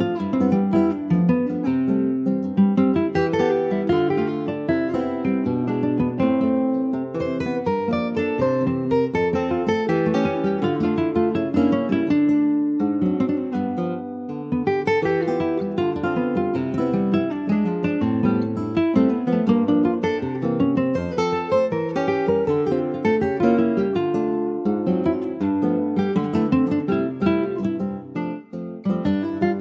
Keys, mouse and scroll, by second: 0.0 2, 0.3 click, 0.8-2.0 scroll up 1, 2.0 middle click, 2.4 click, 2.9 3, 3.0 click, 3.6 middle click, 4.0 |, 7.4-8.4 middle drag, 8.4 e, 10.8 Tab, 11.0 click, 11.8 2, 12.0 click, 12.8 Tab, 13.1 click, 14.0 2, 14.2 click, 15.3 alt+shift+click, 16.2 ctrl+b, 23.0 Tab, 23.2 click, 23.4 scroll down 1, 23.7 middle click, 24.2 click, 24.5 scroll up 2, 24.7 Tab, 24.9 middle click, 25.3-25.7 scroll up 1, 25.7 click, 26.1 click, 27.1 alt+shift+click, 28.0 ctrl+b, 29.3 Tab, 29.5 click.